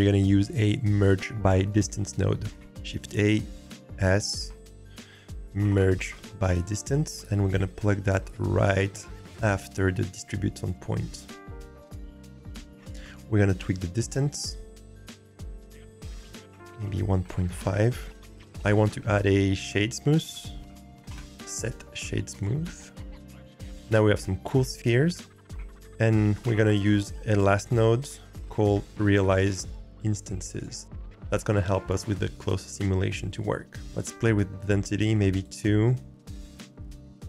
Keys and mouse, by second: 2.5 shift+a, 12.7-14.0 drag, 14.0 g, 14.9-16.0 drag, 16.5-17.6 drag, 18.8 shift+a, 20.6 s, 25.5 shift+a, 28.7 Down, 34.9 click, 36.1-37.2 middle drag.